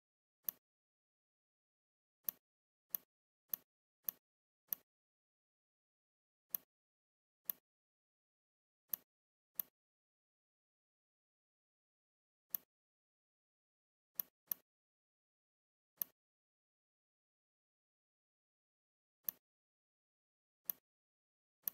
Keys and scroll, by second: 17.1 Delete.